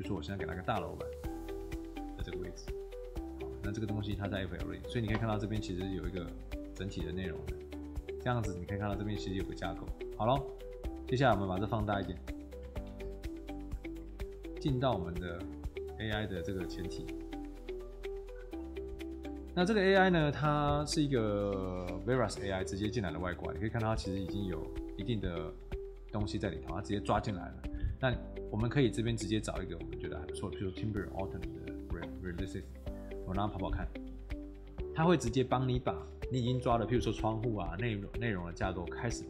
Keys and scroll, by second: 4.3 Escape, 8.7 Escape, 11.8 t, 12.9 w.